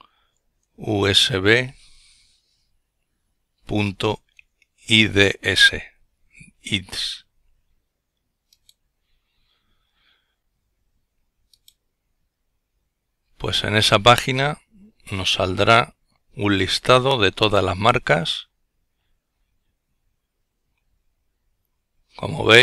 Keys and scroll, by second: 0.0-0.7 typing.